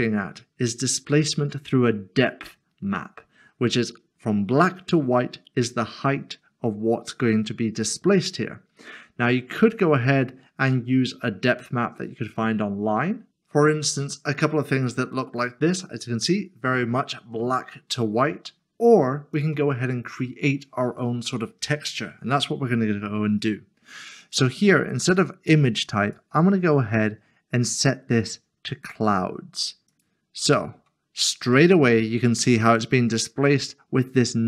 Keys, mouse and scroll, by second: 13.3-14.5 scroll down 1, 14.5 scroll up 1, 15.4 scroll down 1, 19.3 click, 26.0 click, 29.9 click, 31.6 middle click.